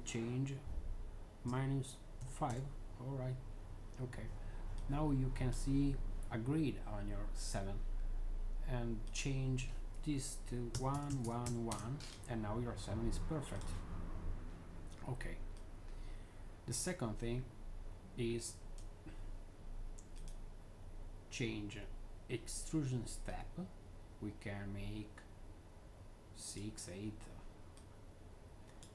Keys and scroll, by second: 1.4-2.4 typing, 10.6 1, 10.8 Tab, 11.1 Tab, 11.1 1, 11.6 Return.